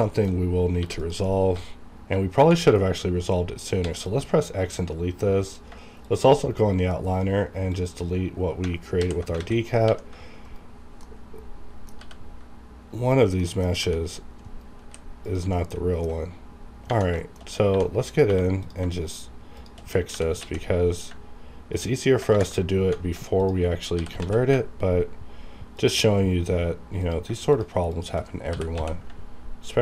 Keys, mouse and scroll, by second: 0.8 2, 1.0 click, 1.4 scroll up 1, 2.6-3.8 scroll down 2, 3.8 x, 4.0-5.7 drag, 6.0 shift+click, 6.4-7.6 right drag, 7.6 click, 8.9 alt+h, 9.4 alt+a, 9.7 click, 9.9 g, 10.4 right click, 11.0 middle click, 12.0 g, 13.1 right click, 13.1 right click, 13.4 middle click, 13.7 g, 14.4 right click, 14.8 h, 15.2 click, 15.5 middle click, 16.2-16.5 scroll up 1, 17.0 scroll down 1, 17.2 shift+middle click, 17.5 scroll up 1, 17.6-18.3 typing, 18.5 click, 19.1 shift+click, 20.1 g, 20.4 x, 22.7 ctrl+shift+Tab, 23.4 ctrl+click, 23.9 ctrl+g, 24.2 ctrl+x, 25.8 ctrl+click, 26.9 click, 27.5 shift+click, 28.5 g, 28.8 x.